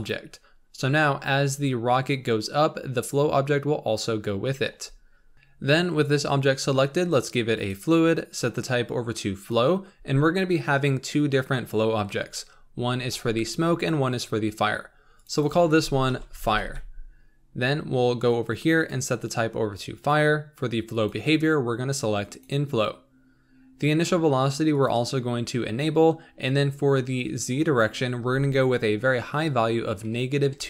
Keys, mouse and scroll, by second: 0.2 ctrl+p, 5.1 scroll down 3, 5.3-7.6 shift+middle drag, 7.6-15.2 drag, 15.3-30.6 drag.